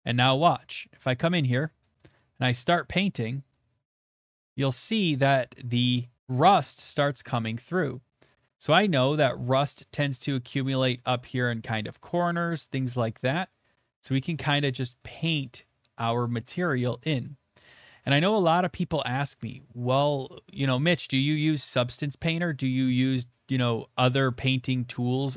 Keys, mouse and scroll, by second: 0.1 middle click, 0.5-0.8 shift+middle click, 0.5 middle click, 0.6 middle click, 0.6 shift+middle click, 0.7 middle click, 1.1 shift+middle click, 1.8 click, 2.2 click, 3.1 click, 3.5 click, 3.8 click, 4.0 click, 4.3 click, 5.1 middle click, 5.7 middle click, 6.6 middle click, 7.0 shift+middle click, 7.5 click, 8.2-9.3 drag, 9.3 middle click, 9.8-11.6 drag, 11.9 shift+middle click, 12.4 click, 12.7 click, 13.0 middle click, 13.6 click, 14.0 click, 14.7 middle click, 15.2 click, 15.6 middle click, 17.4 middle click, 17.8 click, 18.6 middle click, 19.0 shift+middle click, 20.4 click, 20.7 middle click, 21.2 shift+middle click, 21.7 click, 22.0 middle click, 22.8 click, 23.3 middle click, 23.6 shift+middle click, 24.7 click, 25.1 click.